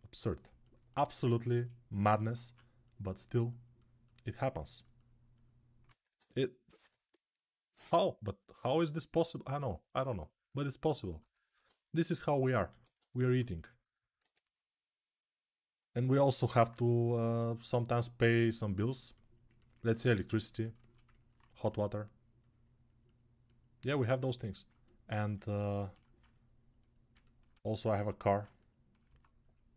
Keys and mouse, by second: 2.2 2, 5.8 1, 6.6 3, 9.5-11.7 right drag, 12.5 alt+q, 14.0 1, 16.1-24.0 alt+right drag, 24.0-26.9 alt+drag.